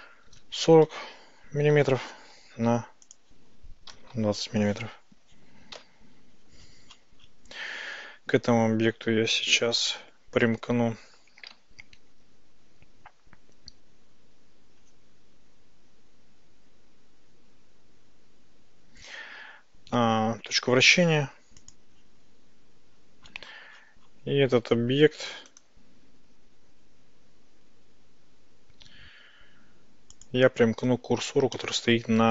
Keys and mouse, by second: 3.3-4.9 drag, 5.8 KP_Decimal, 9.9-21.8 drag, 22.3 Tab, 26.5-31.3 drag, 31.6-32.3 shift+middle drag.